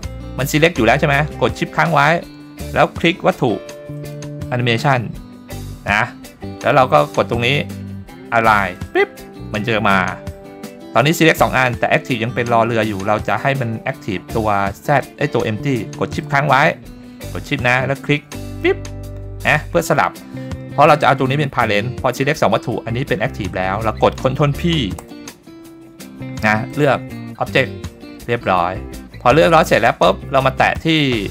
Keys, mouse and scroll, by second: 0.8-1.6 scroll up 1, 4.0 shift+click, 8.7 click, 11.7-12.7 scroll up 1, 18.4 shift+click, 25.0 ctrl+p, 28.2-28.7 scroll down 2, 29.1-29.8 scroll up 2, 29.8-30.6 scroll up 1, 30.6 click.